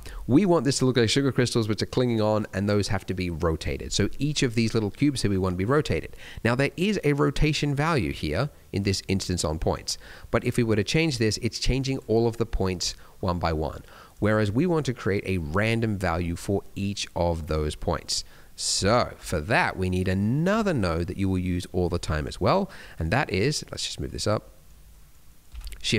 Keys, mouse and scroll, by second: 0.6 middle click, 0.8 scroll up 1, 4.2 middle click, 5.3-6.4 scroll up 4, 5.9 middle click, 6.4 middle click, 7.9-8.7 scroll down 3, 8.7-9.3 scroll up 4, 9.4 click, 12.3 click, 17.2-17.6 scroll down 2, 18.0 click, 18.7 g, 19.5 scroll up 2, 19.8 middle click, 20.1 scroll up 2, 20.4 click, 22.8-23.2 scroll down 1, 23.3 click, 24.5 middle click, 24.7-25.1 scroll up 2, 24.9 middle click, 25.6 shift+a.